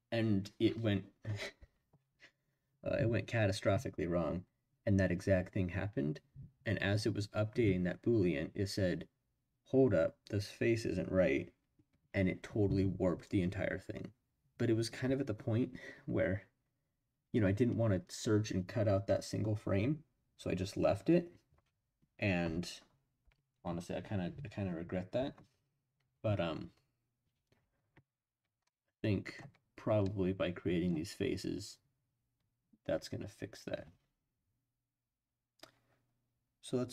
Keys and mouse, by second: 28.6 middle click, 30.1 middle click.